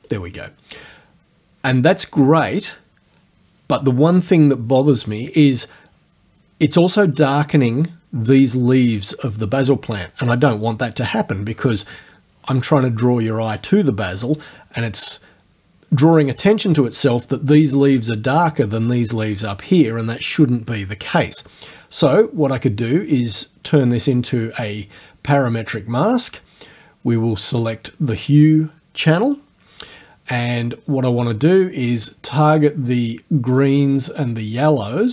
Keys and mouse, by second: 0.3-3.3 middle drag, 23.2 click, 31.4-34.1 drag.